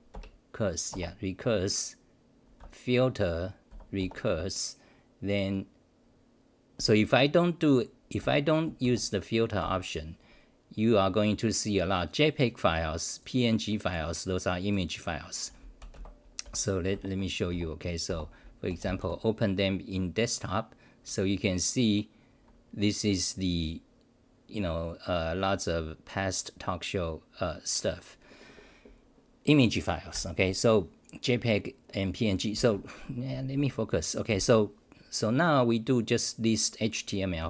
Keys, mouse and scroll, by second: 16.4 r, 16.9 <, 17.5 r, 18.1 Return.